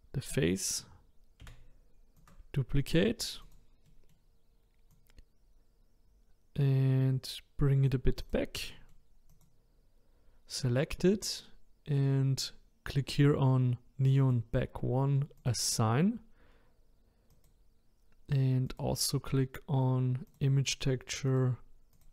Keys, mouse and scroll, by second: 1.4 shift+d, 3.4 click, 3.8-4.9 middle drag, 4.9 click, 8.2 click, 8.7 middle click, 9.3 click, 14.2 click, 15.4-22.1 drag.